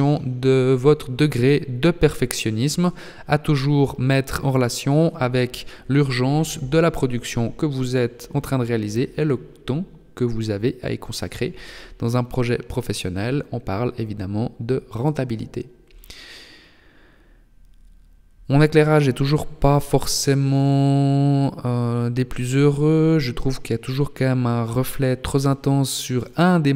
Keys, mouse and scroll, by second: 1.1 g, 4.0 r, 4.5 r, 13.7 r, 15.5 g, 24.4 r.